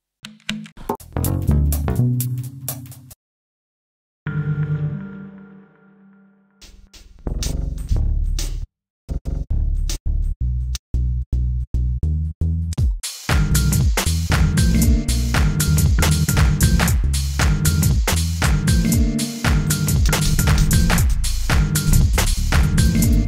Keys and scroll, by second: 9.0 a, 12.0 d, 12.3 f, 13.5-17.0 typing, 19.3 a, 21.6-23.2 typing.